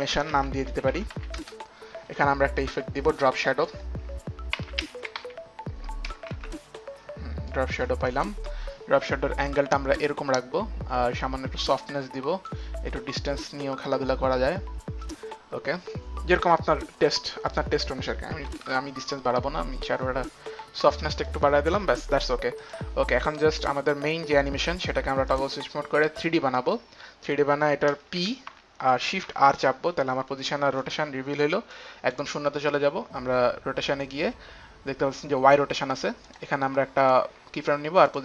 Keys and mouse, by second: 0.0-1.9 typing, 3.6 click, 3.8-6.6 typing, 4.1 click, 4.4 click, 5.3 click, 7.8 click, 10.0 click, 10.6 s, 11.8 click, 11.9 click, 13.4 click, 17.2 click, 17.9 click, 18.6 KP_5, 18.8 Return, 20.1 Return, 20.1 click, 20.1 KP_5, 21.1 Return, 21.1 click, 21.1 KP_5, 22.2 Return, 22.2 KP_5, 22.8 Return, 22.8 click, 23.0 click, 23.8 click, 27.8 click, 28.4-30.0 typing, 31.9 click, 34.5 click, 36.4 click, 37.1 click.